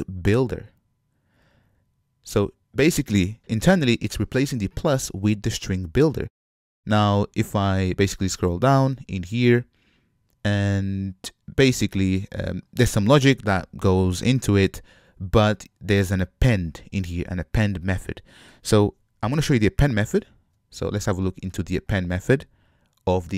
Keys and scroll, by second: 20.2 ctrl+Tab.